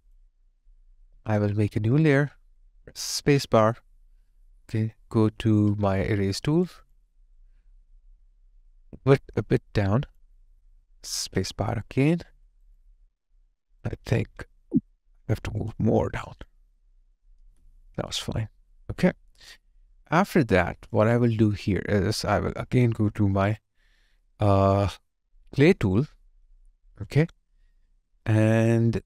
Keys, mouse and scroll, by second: 1.1 alt+right click, 3.2 space, 6.6 Tab, 6.7 alt+click, 7.1 alt+right click, 12.1 space, 12.3 alt+right click, 12.8 alt+click, 14.5 ctrl+z, 15.4 alt+click, 17.5 alt+click, 18.2 alt+click, 20.0 alt+right click, 20.4 alt+click.